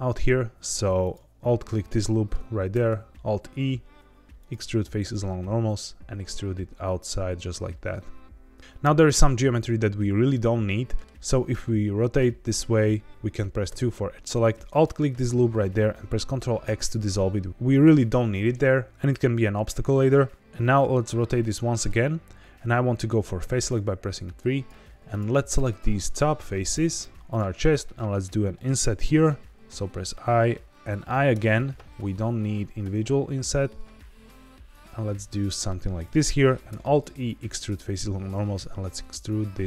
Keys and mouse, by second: 2.0 middle click, 2.7 alt+e, 10.3 middle click, 11.0 middle click, 11.4 middle click, 13.6 2, 14.6 alt+click, 16.6 ctrl+x, 20.5-21.8 middle drag, 23.3 3, 24.4 click, 25.0 shift+click, 25.4 shift+click, 25.7 middle click, 26.9 shift+click, 27.3 shift+click, 27.6-28.7 middle drag, 29.2 i, 31.3 i, 36.0 click, 36.6 alt+e.